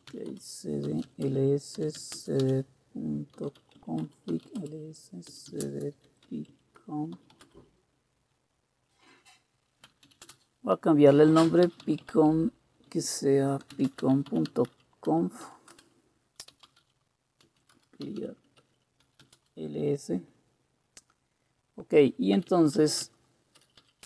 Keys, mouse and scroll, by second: 0.0-7.9 typing, 9.6-19.8 typing, 22.1-24.0 typing.